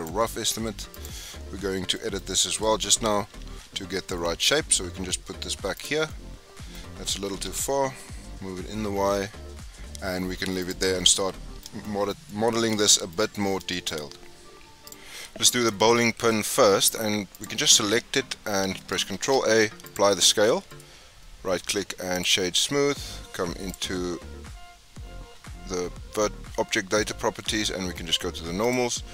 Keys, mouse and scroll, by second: 0.9 click, 1.4-1.9 scroll down 4, 1.9-2.3 shift+middle drag, 2.3 scroll up 2, 3.3 f, 3.6 g, 6.0 scroll down 2, 6.0-7.2 middle drag, 7.2 g, 11.0-14.5 middle drag, 17.3 click, 19.1 ctrl+a, 20.7-23.6 right drag, 23.6 click, 28.6-29.1 drag.